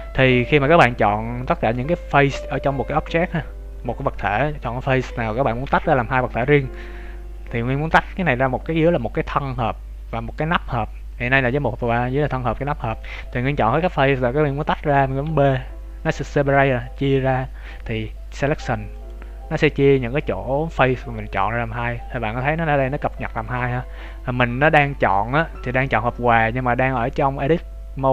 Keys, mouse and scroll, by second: 2.0-3.5 scroll up 1, 19.7 scroll down 2, 21.4-23.0 scroll up 1.